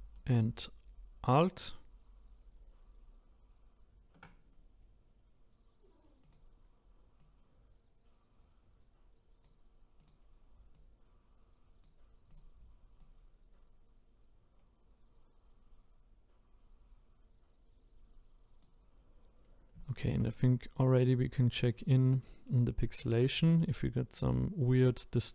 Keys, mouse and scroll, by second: 7.3 click, 10.0 click, 19.9-21.4 shift+middle drag, 21.4-22.2 scroll up 2, 22.2 middle click, 22.9-23.4 scroll down 1, 23.4 middle click, 23.8 scroll up 1, 24.3-25.3 middle drag.